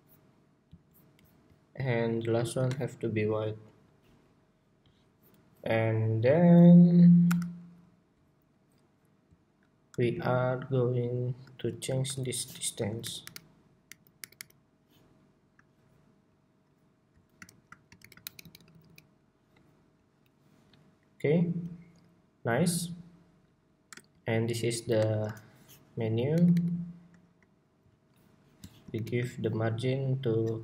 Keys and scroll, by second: 11.6 super+g, 12.6 super+g, 26.0 alt+Right, 26.7 alt+Right, 28.6 alt+shift+Right.